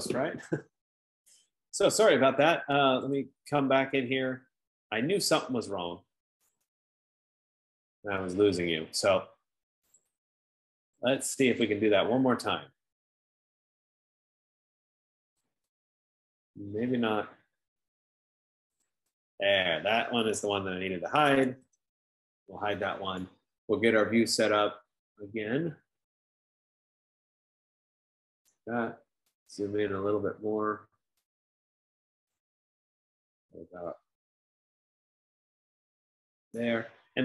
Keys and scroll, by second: 21.5-22.4 typing, 34.2 F15.